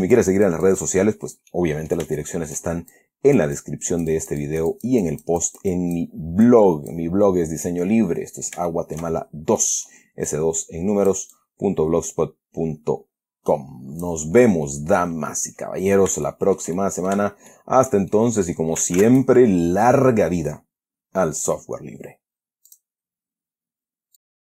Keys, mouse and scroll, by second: 0.0-1.4 shift+drag, 1.8-3.0 middle drag, 3.2-6.5 shift+drag, 6.8 click, 7.5 scroll down 2, 8.0-9.1 middle drag, 9.1-9.5 shift+scroll down 2, 9.5-9.8 shift+scroll up 2, 9.9 middle click, 10.6-11.6 drag, 11.7-14.6 drag, 15.0-16.4 middle drag, 16.6-17.6 shift+middle drag, 17.8 shift+middle click, 18.4 shift+middle click, 19.3 ctrl+s, 19.4 ctrl+click, 23.0 click.